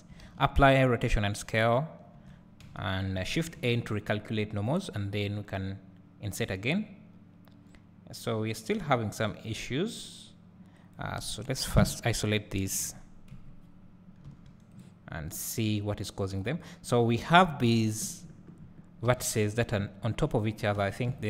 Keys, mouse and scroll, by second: 0.8 ctrl+a, 2.2 Tab, 2.4 Tab, 2.7 a, 3.6 shift+n, 11.7 KP_Divide, 12.8 KP_7, 13.3 KP_Decimal, 14.3 s, 14.8 right click, 15.1 scroll up 1, 16.4 click, 17.6 KP_Decimal, 18.2 scroll up 2, 19.1 alt+a, 19.6 click, 20.8 w.